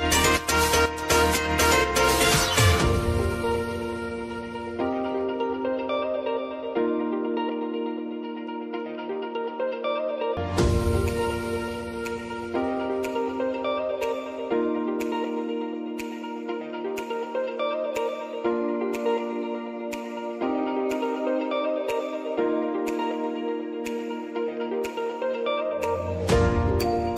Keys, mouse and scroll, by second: 1.1 click, 4.8 Return, 8.8 click, 10.1 Return, 12.4-13.2 scroll down 1, 13.5 k, 16.5 click, 20.4 Return, 21.5-25.4 drag.